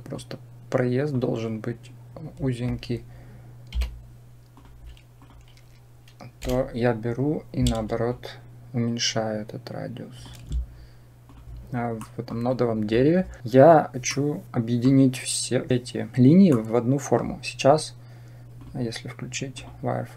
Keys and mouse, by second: 0.0-1.0 drag, 6.2 l, 8.1-10.1 shift+drag, 11.8 middle click, 14.1 middle click, 16.5 middle click, 18.5-19.6 drag.